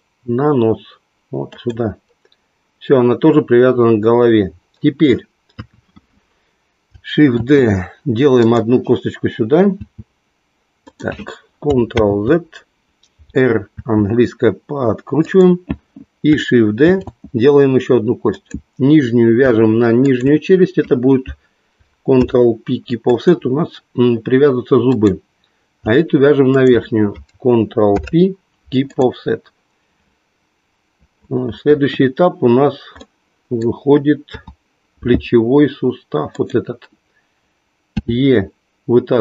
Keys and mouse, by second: 1.6 click, 5.4 KP_3, 7.4 shift+d, 9.8 e, 10.9 click, 11.9 ctrl+z, 14.8 r, 15.3 click, 16.9 shift+d, 22.0 ctrl+p, 27.8 ctrl+p, 31.6 KP_1, 34.3 KP_7, 36.4 click, 37.9 e.